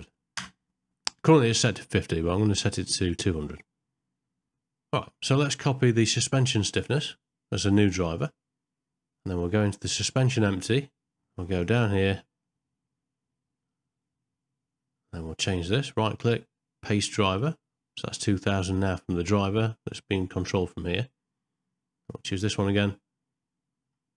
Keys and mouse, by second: 6.8-8.3 right drag, 9.6 click, 11.5 click, 12.5-15.0 middle drag, 15.8-17.5 right drag, 22.3 click.